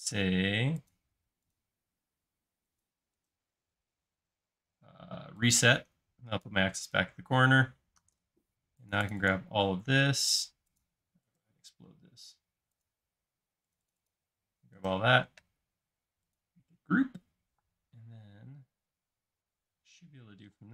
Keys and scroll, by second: 17.5 m, 20.5 m.